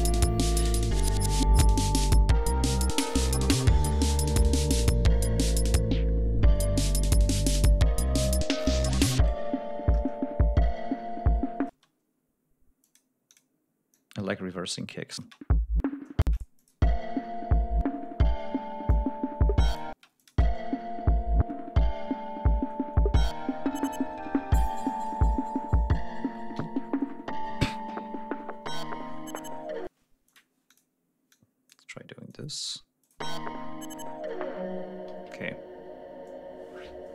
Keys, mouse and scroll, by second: 0.4 ctrl+scroll down 2, 0.7 ctrl+scroll up 2, 1.6 ctrl+scroll down 2, 2.0 ctrl+scroll up 2, 2.7 ctrl+scroll down 2, 4.0 ctrl+scroll down 2, 4.7-5.0 ctrl+scroll up 2, 5.7 ctrl+scroll down 2, 5.9 ctrl+scroll up 2, 7.8 ctrl+scroll up 2, 8.5 ctrl+scroll down 2, 11.7 space, 12.8 click, 13.3 click, 13.9-15.3 drag, 15.5 click, 15.6 space, 16.6 space, 16.7 click, 19.3 click, 20.3 space, 21.0 ctrl+scroll up 2, 22.3 ctrl+scroll down 2, 23.2 ctrl+scroll up 2, 24.4 ctrl+scroll down 2, 26.2 ctrl+scroll down 2, 27.0 ctrl+g, 27.2 ctrl+scroll down 2, 28.4-28.8 ctrl+scroll up 2, 28.9 ctrl+d, 29.8 ctrl+scroll up 2, 30.3 space, 30.7 click, 31.1 click, 31.7 click, 32.7 click, 33.4 click, 33.5 space, 35.5 g, 35.7 ctrl+scroll down 2, 36.8 ctrl+scroll down 2.